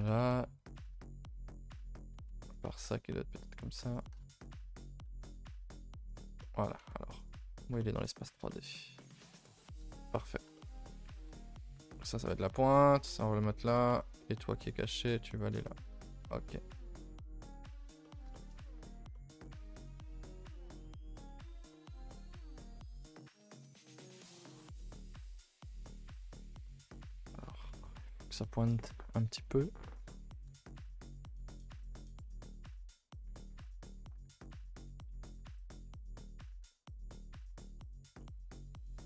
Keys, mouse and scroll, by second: 2.5 click, 3.9 click, 4.2 click, 6.4 middle click, 6.8 z, 7.4-7.8 scroll up 5, 7.8 shift+middle click, 8.1-9.0 scroll up 6, 8.5 middle click, 9.0 middle click, 9.8 KP_0, 16.5 middle click, 17.1-18.0 scroll up 7, 17.4 shift+middle click, 18.0 middle click, 18.5-18.8 scroll up 4, 18.8 middle click, 19.8 a, 19.9 a, 20.1 click, 20.3 g, 21.4 a, 21.6 a, 21.7 middle click, 22.0 Tab, 22.6 click, 22.9 Tab, 23.2 Tab, 24.3 click, 24.6 scroll down 2, 24.8 middle click, 26.0 shift+middle click, 26.2 scroll up 2, 26.8 scroll down 1, 27.0 shift+middle click, 27.9-29.3 shift+middle drag, 29.3 click, 30.4 KP_0, 31.8 click, 34.0 click, 35.4 click, 36.1 click, 38.5 middle click, 38.9-39.0 scroll up 7.